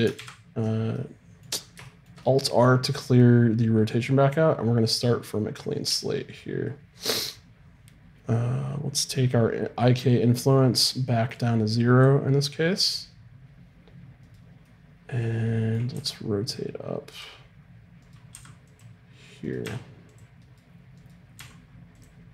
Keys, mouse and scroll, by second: 0.2 alt+r, 0.9-2.0 drag, 12.0-14.2 drag, 14.2-15.9 right drag, 14.6 click, 15.9 r, 18.1-21.0 right drag, 18.3 r, 19.6 r, 21.4 r.